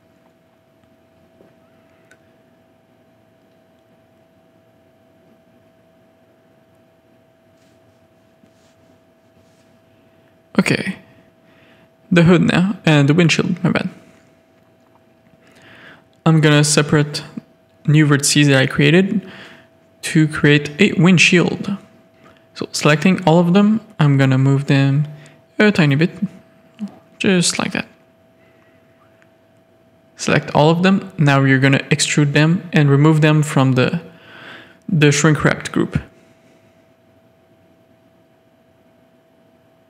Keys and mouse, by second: 0.7-1.1 middle drag, 1.4-3.4 shift+middle drag, 4.2 KP_3, 5.7-8.0 shift+middle drag, 10.3-10.8 middle drag, 11.0 click, 11.3 Tab, 11.4 click, 11.8 click, 12.0 z, 12.2 a, 13.4 click, 14.0 shift+d, 15.5 Tab, 16.3 Tab, 16.5 a, 17.2 middle click, 18.1 click, 18.5-19.7 drag, 20.3 click, 21.2 a, 22.1 middle click, 24.0-25.1 drag, 25.1 a, 27.2-28.7 drag, 28.7 a, 29.8 KP_3, 30.5 shift+middle click, 33.2 z, 34.9 click, 35.5 e.